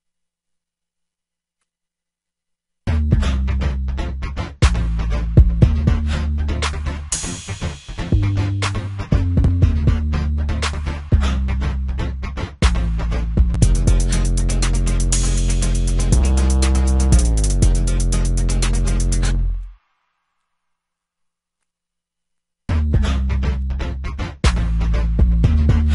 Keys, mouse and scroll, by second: 11.1 click.